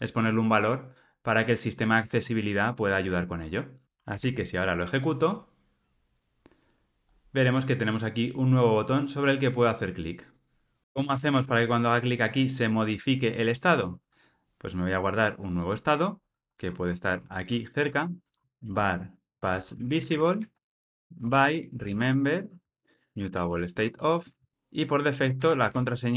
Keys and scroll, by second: 4.0 ctrl+r, 22.6 Return.